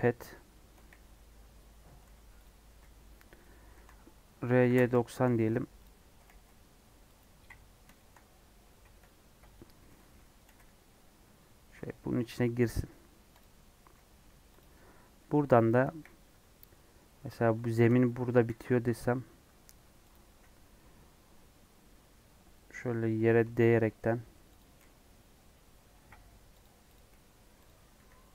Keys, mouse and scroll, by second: 0.7 KP_1, 1.5 scroll down 1, 2.0 g, 2.6 r, 3.8 r, 5.2 g, 5.9 scroll down 1, 6.2 g, 7.4 scroll up 1, 7.9 shift+middle click, 8.2 scroll up 1, 9.0 KP_3, 9.8 g, 10.5 g, 13.0 scroll down 3, 13.3 click, 13.6 middle click, 14.2 Tab, 14.5 click, 15.1 middle click, 15.8 KP_1, 16.6 KP_3, 17.3 scroll up 1, 17.6 shift+middle click, 18.4 e, 20.2 e, 23.8 shift+middle click, 24.0 scroll up 1, 24.5 click, 24.7 g, 26.9 click, 27.1 g.